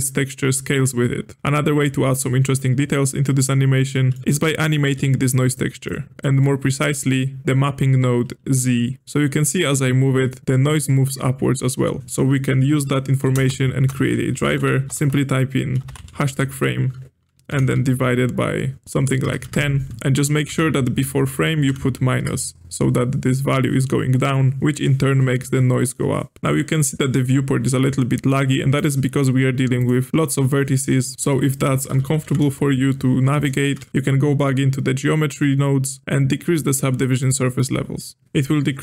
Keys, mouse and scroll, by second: 3.9 middle click, 4.2-4.8 drag, 4.8 g, 5.8 click, 6.2-6.7 middle drag, 6.7-8.4 scroll up 2, 9.0-10.4 shift+drag, 12.0-14.7 drag, 14.9 BackSpace, 19.9-22.7 drag, 26.3 click, 29.1-29.8 drag, 31.0 click, 31.9 a, 32.0 a, 32.2 KP_Decimal, 33.3 click, 33.7 a, 33.9-35.1 scroll up 5, 37.2-38.8 drag.